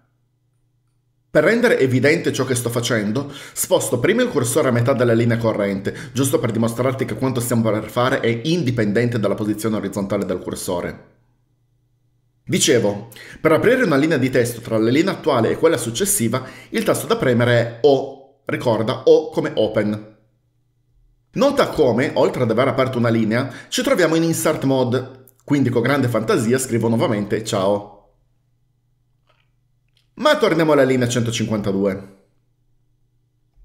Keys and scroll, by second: 4.0-4.9 typing, 18.0 typing, 27.4-28.4 typing, 31.2-32.4 typing.